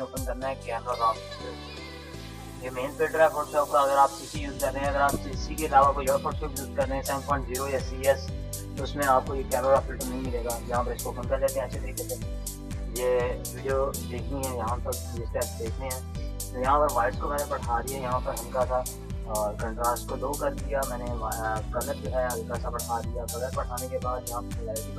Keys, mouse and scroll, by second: 10.4 click, 16.6 click, 19.8 scroll down 1.